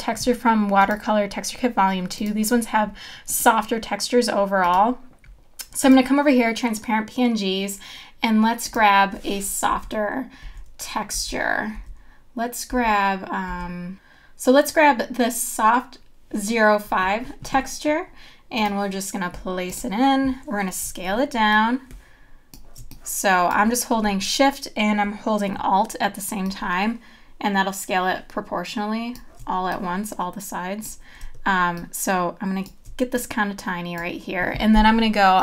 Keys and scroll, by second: 9.7 Down, 11.8 Down.